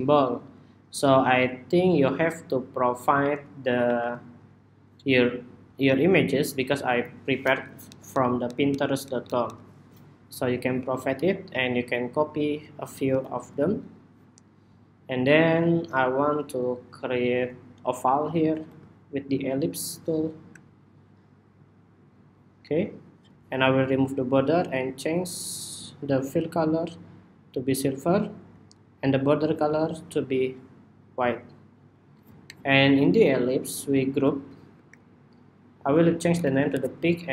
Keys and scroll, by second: 3.5 super+y, 12.6 super+c, 16.1 ⟲, 34.4 super+g, 35.8 super+g.